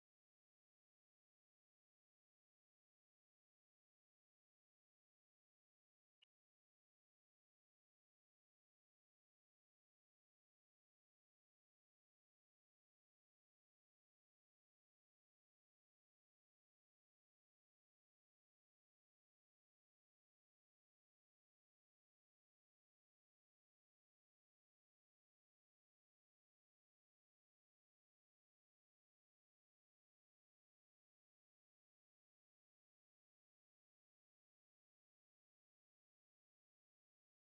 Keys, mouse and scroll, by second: 0.2-3.5 drag, 3.5 shift+a, 9.6-11.5 drag, 12.4-13.5 drag, 13.5 scroll up 1, 13.6 middle click, 13.9 click, 14.0 shift+a, 17.0-18.1 drag, 18.1-18.6 scroll down 6, 18.6-19.2 shift+middle drag, 19.2 Home, 19.8-20.2 scroll up 6, 20.5 Home, 21.1-22.5 drag, 22.5 Tab, 23.3 Tab, 27.3 ctrl+alt+b, 29.2 a, 33.0-37.0 drag, 37.0-37.4 right drag.